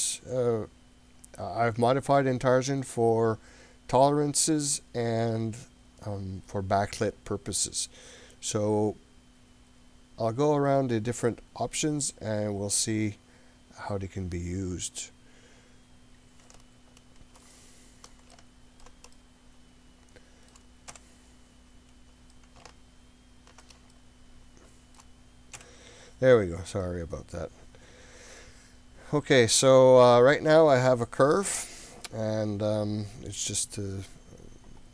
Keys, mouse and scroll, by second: 13.6-14.4 scroll up 1, 14.4-15.7 scroll down 1, 16.6 middle click, 17.6 middle click, 18.4 middle click, 19.2-20.7 middle drag, 22.4-23.8 middle drag, 23.9-25.0 shift+middle drag, 25.6 KP_7, 26.8-28.5 middle drag, 29.0-30.3 scroll up 3, 30.3 click, 31.7-32.8 scroll down 2, 32.8 scroll up 1, 33.5 scroll down 1.